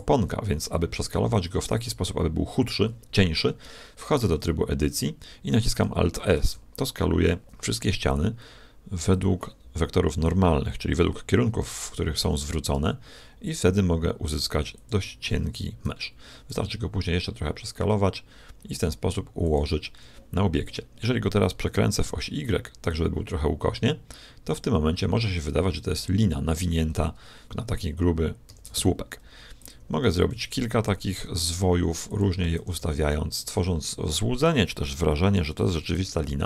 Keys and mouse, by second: 4.2 Tab, 6.3 alt+s, 8.0 click, 12.1 alt+s, 15.3 Tab, 16.4 s, 21.5 r, 28.4 shift+d, 29.9 r, 32.5 shift+d, 35.7 r.